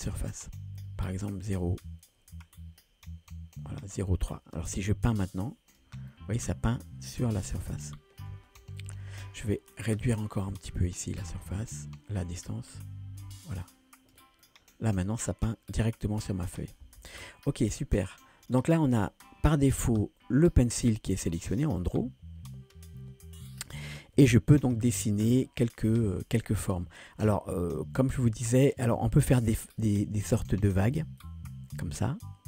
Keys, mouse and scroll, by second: 4.8 middle click, 5.3 click, 6.1-8.5 middle drag, 8.8 ctrl+z, 10.0-13.3 drag, 13.7 click, 14.4-16.4 middle drag, 17.2 ctrl+z, 24.2 KP_1, 25.4 ctrl+middle click, 26.2 shift+middle click, 31.2 click.